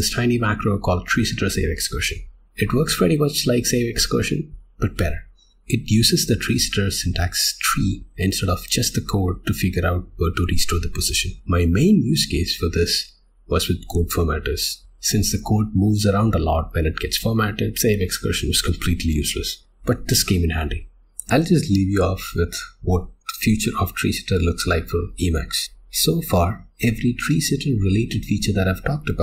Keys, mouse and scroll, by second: 20.8 click.